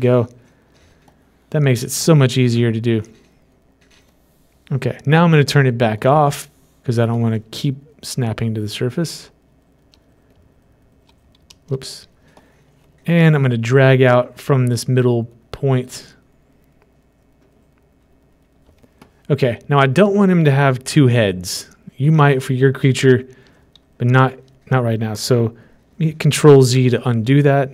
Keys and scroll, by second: 12.0 ctrl+alt+z, 24.4 typing, 26.8 typing.